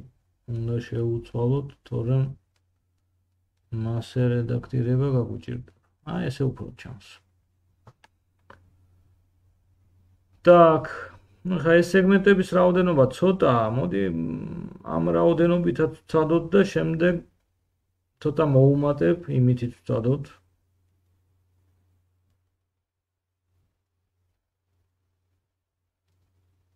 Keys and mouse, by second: 6.7-8.7 middle drag, 8.7-17.5 drag, 11.9 ctrl+z, 12.2 ctrl+z, 12.8 ctrl+z, 17.5 middle click, 17.6-26.7 drag, 20.0 g, 23.1 middle click, 23.1 right click, 23.5 g, 25.5 middle click, 25.5 right click.